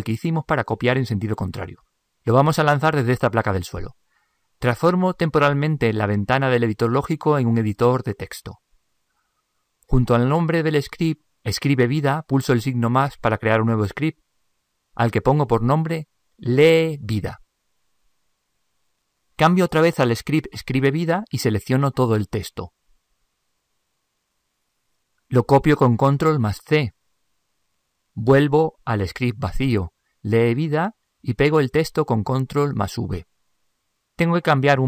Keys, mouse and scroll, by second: 17.2 e.